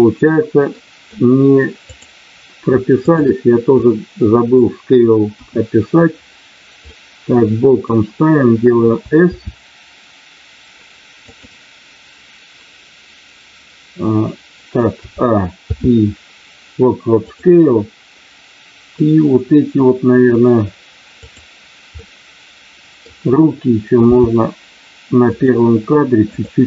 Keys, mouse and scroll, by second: 0.7 middle click, 1.8 click, 3.8 middle click, 5.3 KP_1, 6.8 middle click, 11.2 click, 15.6 i, 19.0-20.3 middle drag, 21.1 click, 21.9-23.1 middle drag, 24.1 r, 25.2 click, 26.3 click.